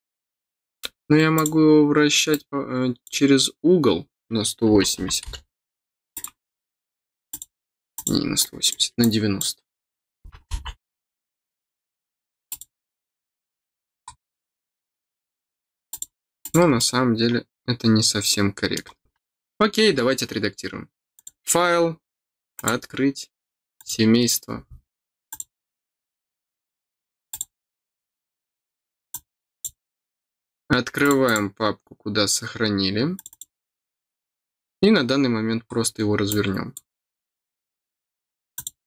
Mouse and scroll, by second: 1.3 click, 2.3 click, 6.1 click, 7.2 click, 7.9 click, 8.3 click, 9.0 click, 12.4 click, 14.0-14.3 scroll down 2, 15.8 click, 16.4 click, 16.7-18.7 middle drag, 19.9 scroll down 1, 21.1 click, 22.5 click, 23.7 click, 25.2 click, 27.2 click, 29.1 click, 31.0 click, 31.2 click, 33.1 click, 35.9 middle click, 36.2 click, 38.5 click.